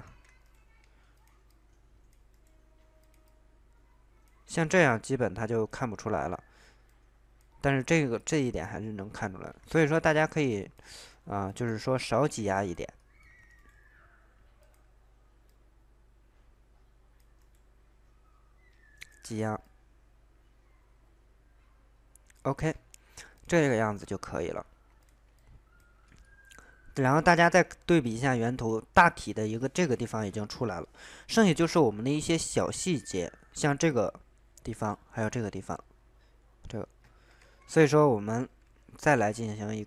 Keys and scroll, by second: 0.1 ctrl+z, 9.8 ctrl+z, 10.9 ctrl+z, 27.4 alt+Tab, 37.4 alt+Tab.